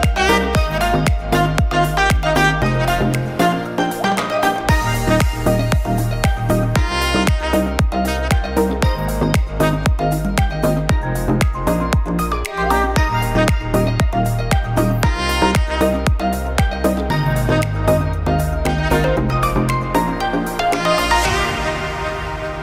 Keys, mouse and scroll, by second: 0.5 click, 2.4 click, 3.7 click, 4.8 click, 6.9 click, 8.7 click, 12.2 click, 13.0 click, 14.1 click, 14.7 click, 15.5-16.1 scroll up 5, 15.6 shift+middle click, 16.1 shift+middle click, 16.3 middle click, 16.7 shift+middle click, 17.0 middle click, 18.1 click, 19.6 click, 21.1 click, 22.0 click.